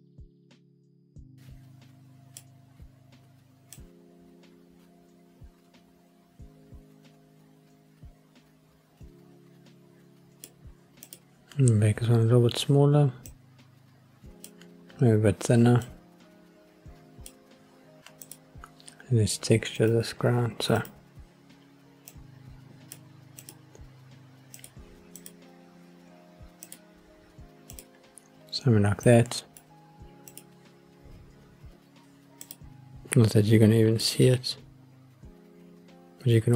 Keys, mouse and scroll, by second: 0.9 click, 3.7 click, 11.0 click, 13.3 click, 15.8 click, 18.2 click, 19.8-20.8 drag, 22.1 click, 23.4-24.7 drag, 25.2-26.7 drag, 27.7 click, 29.0 click, 30.6 click, 32.4 click, 34.0-36.5 middle drag.